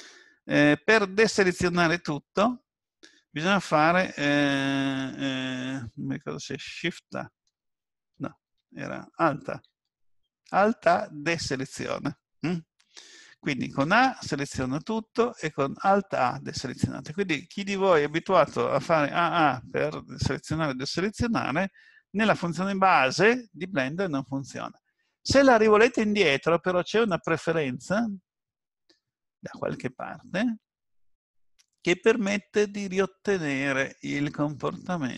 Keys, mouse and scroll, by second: 1.8 a, 7.5 shift+a, 9.7 alt+a, 13.8 a, 15.9 a, 25.8 click.